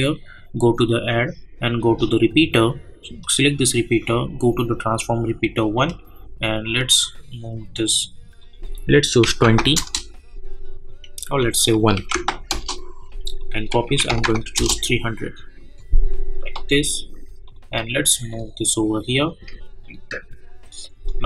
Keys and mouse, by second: 9.7 Return, 11.2 click, 12.5 Return, 13.4 click, 14.5 Return, 17.4-20.1 drag.